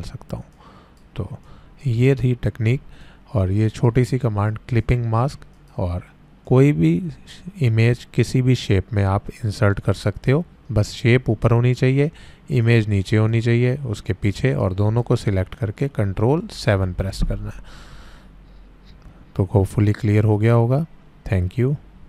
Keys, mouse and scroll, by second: 1.7-2.1 click, 12.6-15.2 drag, 16.5 ctrl+7.